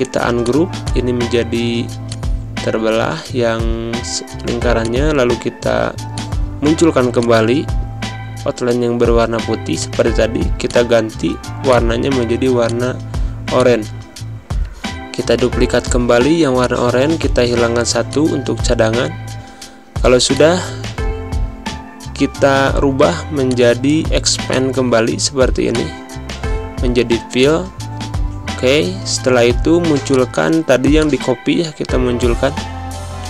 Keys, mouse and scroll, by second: 0.3 click, 1.4 z, 1.9-3.8 drag, 3.8 scroll down 1, 8.1-9.6 drag, 8.1 r, 9.6 click, 10.3 space, 10.5 click, 10.7 space, 11.5-15.1 drag, 15.1-15.7 scroll down 1, 16.4 click, 20.2 click, 23.3-26.9 drag, 26.9 v, 27.3 click, 28.1 ctrl+z, 29.1 scroll down 1, 30.1 click, 32.4 ctrl+shift+[.